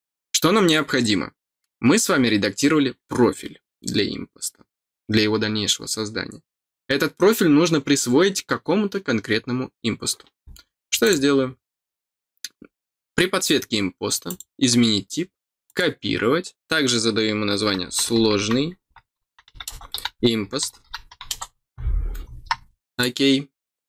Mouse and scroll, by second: 11.0 click, 14.2 click, 15.6 click, 22.9 click.